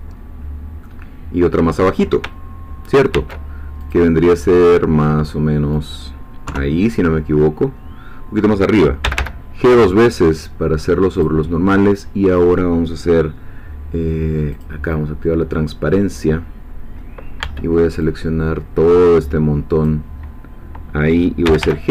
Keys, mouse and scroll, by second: 0.9-2.0 middle drag, 3.1 ctrl+r, 3.8 click, 5.7 click, 6.5 3, 9.0 g, 11.1 click, 14.5 click, 17.4 b, 18.0-21.5 drag, 21.5 g, 21.6 y.